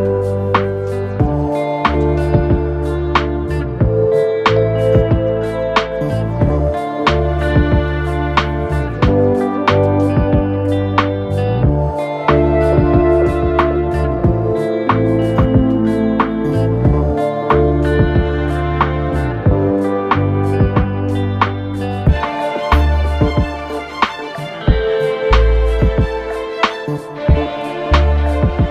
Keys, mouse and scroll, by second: 0.1 click, 0.9 click, 1.8 click, 3.0 click, 3.7 scroll down 2, 3.9-5.4 middle drag, 5.4 click, 6.1 KP_7, 7.4 click, 8.7 click, 10.3 click, 11.5 click, 12.1 click, 13.3 KP_1, 14.0-15.6 shift+middle drag, 15.6 click, 16.8 click, 17.4 click, 18.8 click, 19.3 click, 20.4 click, 23.1 click, 24.9-25.5 scroll down 1, 25.6 KP_3, 26.5-27.0 scroll up 2, 27.0-27.7 scroll down 2, 27.7 shift+middle click, 28.3 Tab, 28.5 scroll down 2.